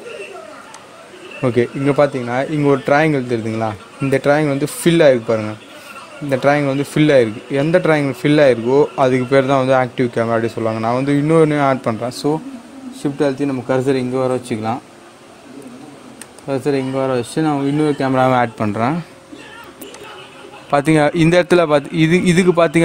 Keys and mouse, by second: 16.3 shift+right click, 18.1 shift+a, 19.8 click.